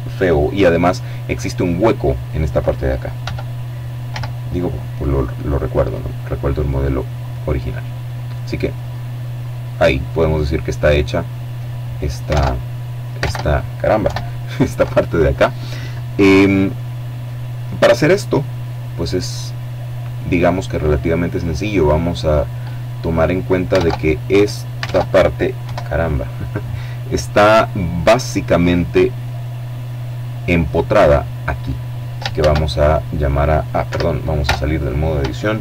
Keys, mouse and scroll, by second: 2.2 e, 3.1 z, 6.1 click, 6.6 right click, 7.8 middle click, 8.1 scroll down 1, 8.3 middle click, 11.3 alt+Tab, 12.2 alt+Tab, 12.9 KP_7, 18.4-22.1 middle drag, 22.8 alt+Tab, 23.9 alt+Tab, 24.6 KP_7, 27.0-30.2 drag, 31.3 shift+a, 32.8 Escape, 34.5 shift+a.